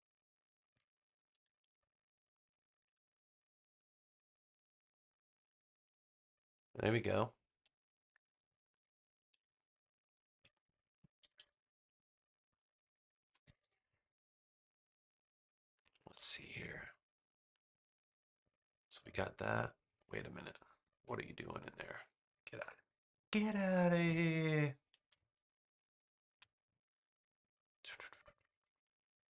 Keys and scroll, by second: 2.7 a, 8.0 super+-, 9.5 space, 11.1 super+=, 11.9 space, 20.5 space, 22.5 BackSpace, 24.9 super+=, 25.6 space.